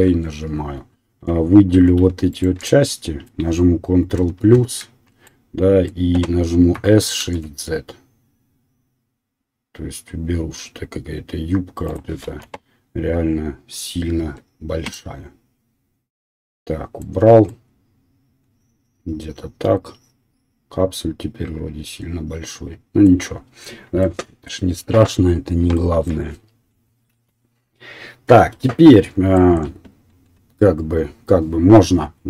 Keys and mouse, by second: 0.1 Tab, 1.7 3, 2.3 alt+click, 4.1 ctrl+KP_Add, 4.5 ctrl+KP_Add, 6.7 s, 8.3-12.0 drag, 12.0-31.3 middle drag, 12.3 KP_1, 14.5 Tab, 27.1 KP_1.